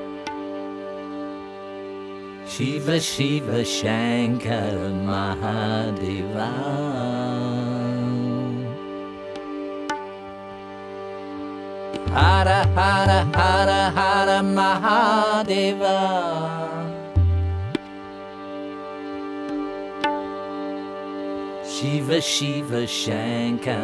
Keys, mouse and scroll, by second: 1.7 click, 2.6-3.3 drag, 3.8 click, 12.3 click, 13.5 click, 15.6-17.0 drag, 18.0-18.6 drag, 19.1-20.2 drag, 21.0 click.